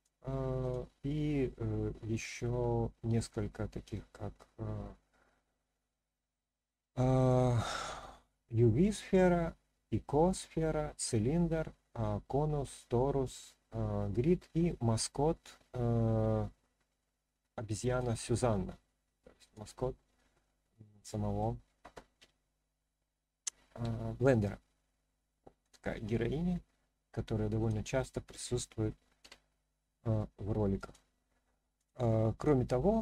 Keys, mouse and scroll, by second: 0.6-18.0 drag, 19.4 click, 20.4-21.4 middle drag, 22.2 r, 23.8 z, 25.6 click, 26.1-27.1 middle drag, 27.6 click, 29.2 g, 30.0 z, 30.7 click, 31.7 click, 32.3-33.0 drag.